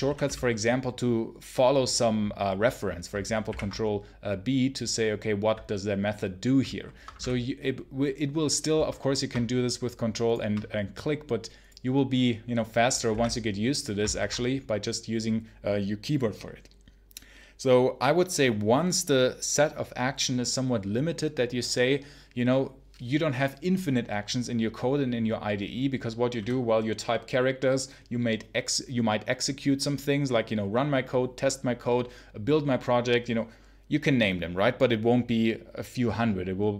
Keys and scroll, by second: 3.3 ctrl+b, 6.8 Escape, 7.0 space, 7.0 h, 13.0 ctrl+b, 14.0 ctrl+alt+Left.